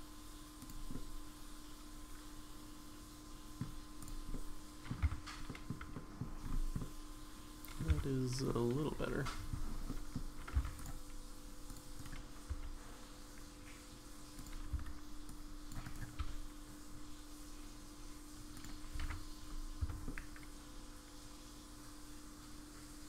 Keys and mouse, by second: 0.9-3.6 middle drag, 4.0 click, 4.3 middle click, 5.0 Tab, 5.5 middle click, 5.9 middle click, 6.8 middle click, 7.9 Tab, 9.9 middle click, 10.5 c, 12.5 s, 14.7 c, 16.2 s, 19.0 alt+z, 19.8 Tab, 20.0-23.0 middle drag.